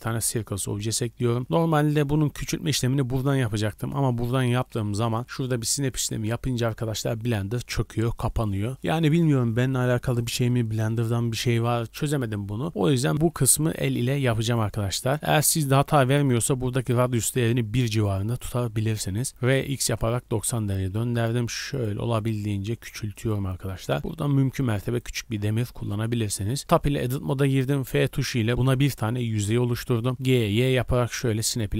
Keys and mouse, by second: 1.7-14.4 drag, 19.1-21.8 drag, 19.1 r, 20.7 s, 21.8-24.0 middle drag, 22.0 s, 25.8 Tab, 27.8 f, 30.1 g.